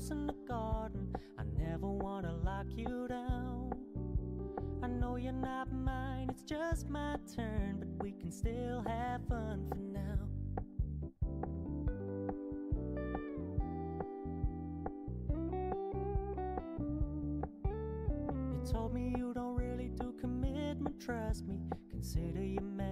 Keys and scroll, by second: 1.6 ctrl+j, 4.1 ctrl+j, 6.0 ctrl+t, 18.2 ctrl+t.